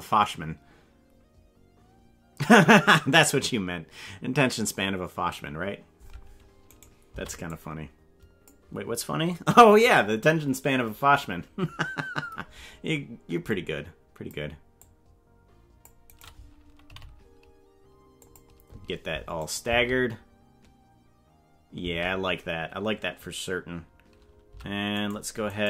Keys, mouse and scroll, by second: 6.7 right click, 7.1 c, 16.9 g, 19.4 click, 19.6 space, 21.8 space, 24.5 c, 25.5 right click.